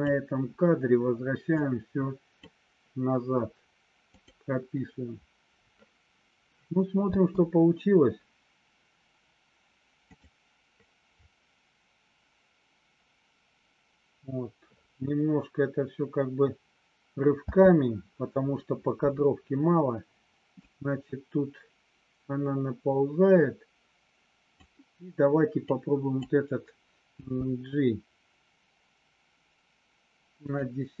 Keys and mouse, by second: 1.6 click, 4.1 click, 7.1 space, 10.1 click, 17.5 space, 20.6-24.6 drag, 25.6 click, 27.1 g, 30.5 click.